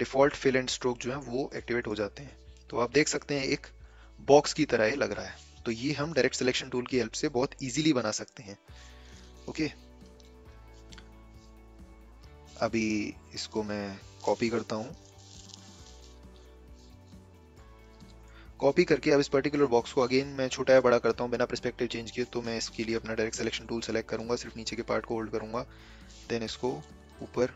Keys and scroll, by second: 25.9 a.